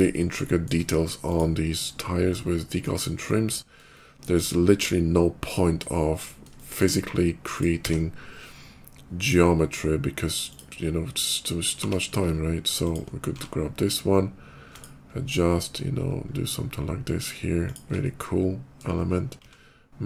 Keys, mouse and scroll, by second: 1.0 shift+click, 1.5 shift+middle click, 1.7 shift+middle click, 2.0 shift+middle click, 3.8 shift+middle click, 4.2 shift+middle click, 4.4 shift+middle click, 5.6 shift+middle click, 6.4 shift+middle click, 7.2 shift+click, 7.6 d, 9.0 click, 10.3 click, 11.7 g, 12.2 ctrl+g, 12.7 ctrl+click, 13.0 d, 14.6 ctrl+shift+click, 16.5 ctrl+shift+middle click, 17.5 ctrl+shift+click, 17.8 ctrl+shift+middle click, 19.3 s, 20.0 click.